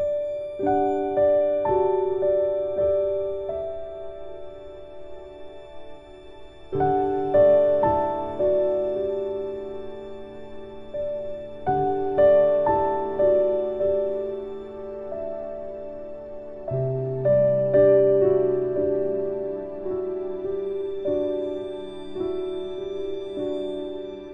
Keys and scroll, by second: 4.1 ctrl+q, 10.2 ctrl+k, 19.6 ctrl+z.